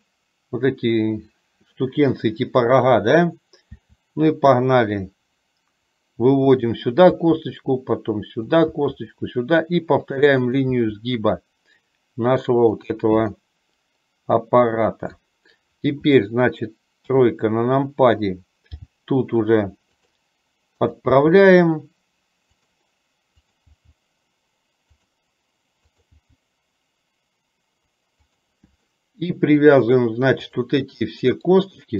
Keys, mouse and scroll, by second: 3.8 e, 7.2 e, 9.0 e, 13.6-15.5 middle drag, 17.2 KP_3, 19.0 g, 20.8 click, 21.5 g, 23.6 click, 26.1 click, 26.5 g, 29.1 middle click, 30.6 click, 31.3 middle click.